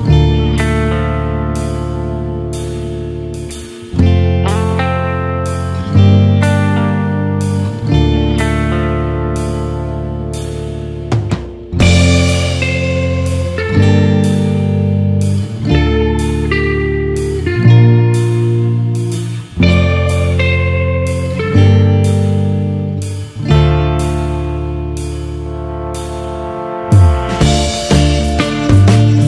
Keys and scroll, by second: 24.5 ctrl+=.